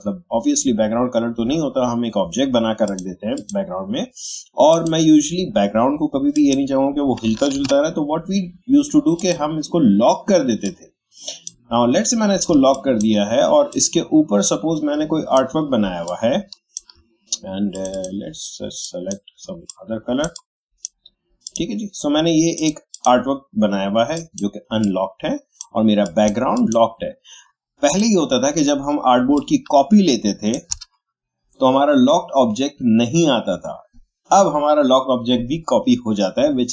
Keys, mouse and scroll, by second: 2.8 click, 7.5 ctrl+z, 9.2-12.5 drag, 12.5 space, 12.7 click, 13.0 space, 13.7-16.0 drag, 16.0-26.0 shift+drag, 29.3-32.9 alt+drag.